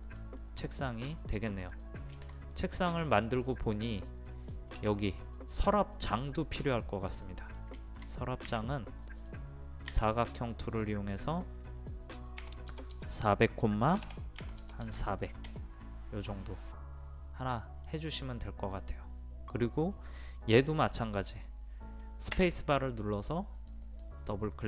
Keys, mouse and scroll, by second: 0.5 middle click, 1.8 scroll down 1, 2.2 shift+middle click, 2.7 scroll up 1, 3.2 middle click, 3.7-4.0 scroll up 1, 4.0-7.6 middle drag, 7.6 scroll down 1, 7.8 shift+middle click, 8.2 scroll up 1, 9.0 click, 9.9 Escape, 10.7 click, 12.4 KP_4, 12.7 KP_0, 14.4 KP_4, 14.6 KP_0, 16.3-18.3 middle drag, 23.3 space, 23.6 click.